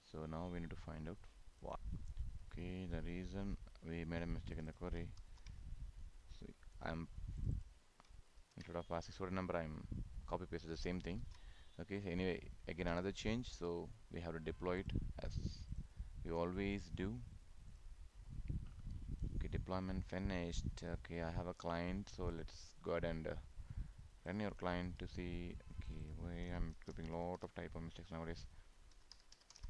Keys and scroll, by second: 5.2 ctrl+c, 8.4 ctrl+v, 11.2 ctrl+s.